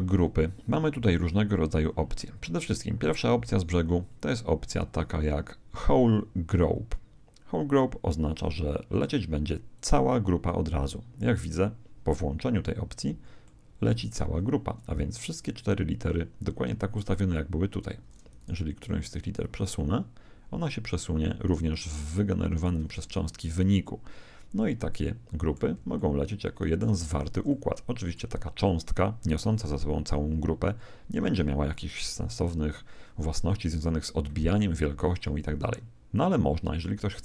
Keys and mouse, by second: 9.7 click, 13.5-16.5 middle drag, 18.3 right click, 19.4 click, 24.5-29.3 middle drag, 32.0 KP_1.